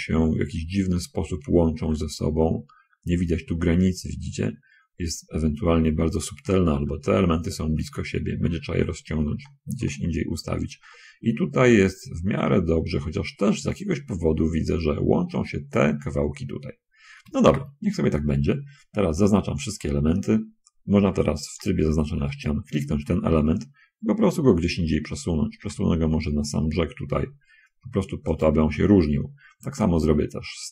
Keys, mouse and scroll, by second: 2.2 scroll up 1, 3.2 scroll up 1, 6.3-7.0 scroll down 2, 8.4-9.6 scroll down 1, 9.8-11.2 shift+middle drag, 11.2-11.6 scroll up 1, 12.2 scroll down 1, 12.8 middle click, 13.8 middle click, 17.4 shift+space, 19.0 Tab, 21.9 3, 22.6 click, 25.8 g, 28.6 click, 30.0 shift+click.